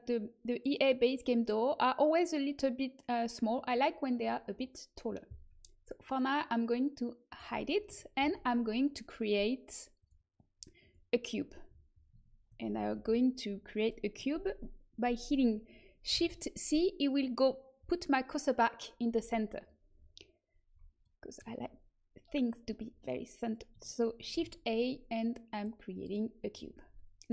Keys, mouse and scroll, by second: 6.4-8.1 drag, 8.1 shift+a, 12.9 ctrl+z, 16.1 shift+c, 21.0-24.3 middle drag, 24.3 shift+a.